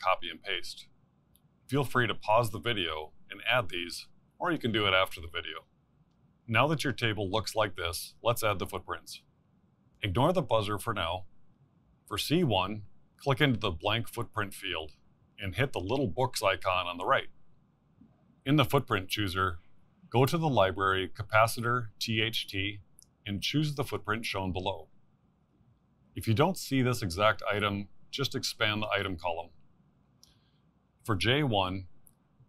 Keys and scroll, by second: 2.3 ctrl+c, 4.1 ctrl+v, 5.0 ctrl+c, 6.3 ctrl+v.